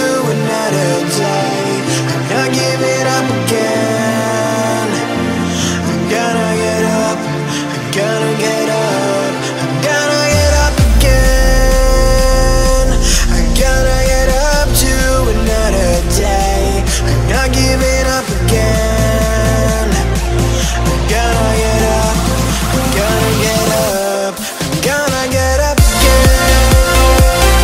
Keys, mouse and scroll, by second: 0.5-2.1 typing, 2.9 click, 5.9-6.6 typing, 6.6 click, 8.3 click, 8.3 typing, 9.7 click, 12.1 Escape, 12.6 click, 12.7 F10, 13.7-16.3 drag, 17.0 right click, 18.3 scroll down 1, 18.4 scroll up 1, 19.0 right click, 20.9 g, 22.1 click, 22.6 right click, 23.2 click, 23.4 F10, 23.8 scroll down 1, 24.4 click, 26.6-27.6 typing.